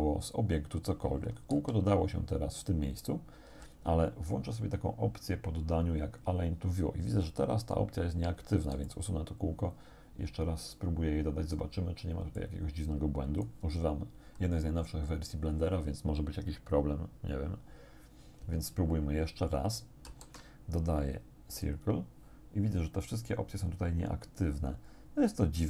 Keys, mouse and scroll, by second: 1.6 z, 3.5 z, 5.1-5.5 scroll down 1, 8.7 x, 8.9 click, 12.4-13.7 drag, 20.1 shift+a, 21.6 click.